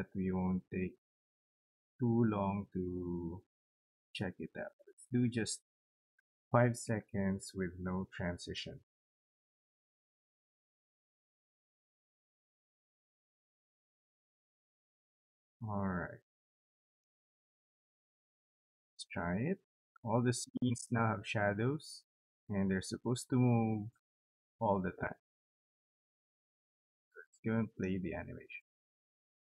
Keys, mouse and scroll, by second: 2.9 click, 4.3 click, 4.6 click, 6.1 5, 7.3 click, 9.1 0, 11.5 click, 13.3 click, 26.3 right click, 27.4 click.